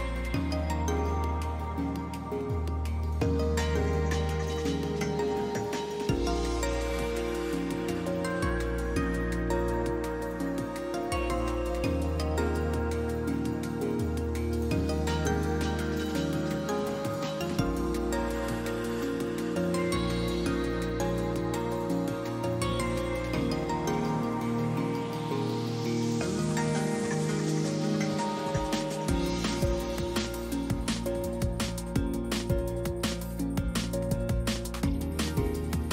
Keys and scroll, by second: 5.8 f, 14.9 s, 15.9 a, 16.1 a, 25.6 alt+x, 30.6 F3, 34.1 Delete.